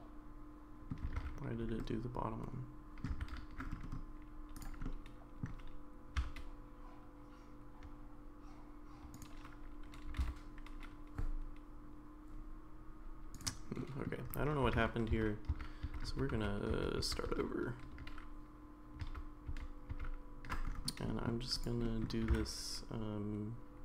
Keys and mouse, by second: 1.2 ctrl+z, 1.8-3.1 middle drag, 3.2 ctrl+z, 4.8 middle click, 6.2 s, 10.1 g, 13.8 middle click, 14.8 ctrl+z, 15.1 ctrl+z, 15.8 ctrl+z, 16.1 ctrl+z, 16.3 ctrl+z, 17.0 ctrl+z, 19.0 ctrl+z, 19.5 ctrl+z, 20.5 ctrl+z, 21.1 middle click, 21.8 middle click, 22.2 g.